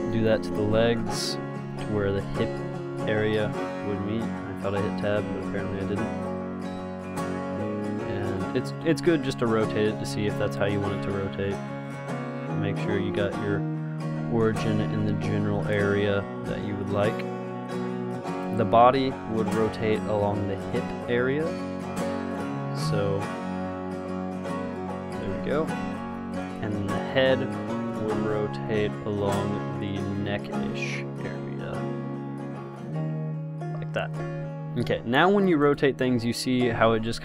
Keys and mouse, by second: 0.0 Tab, 0.8 g, 2.8 g, 6.0 Tab, 6.8 g, 9.1 r, 10.4 ctrl+z, 11.5 Tab, 12.0 g, 13.5 Tab, 14.4 Tab, 15.2 Tab, 15.8 g, 19.6 Tab, 20.3 g, 22.0 Tab, 22.7 g, 24.8 r, 26.1 ctrl+z, 28.8 Tab, 29.4 g, 30.6 Tab, 31.3 g, 33.4 r, 34.6 ctrl+z, 35.9 click, 36.3 r, 36.9 click.